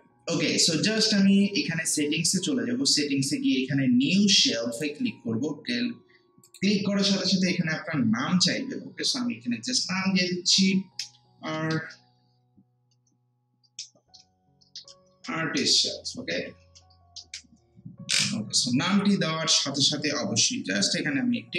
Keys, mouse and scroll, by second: 4.7 click, 11.0-11.5 typing, 13.8-17.1 typing, 19.0-19.7 typing.